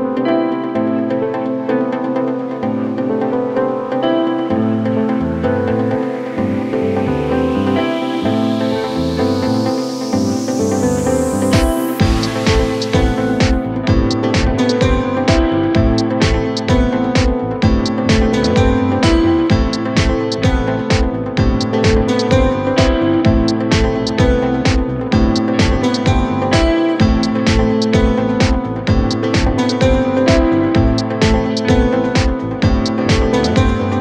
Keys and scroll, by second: 2.0 c, 2.3 e, 12.5 c.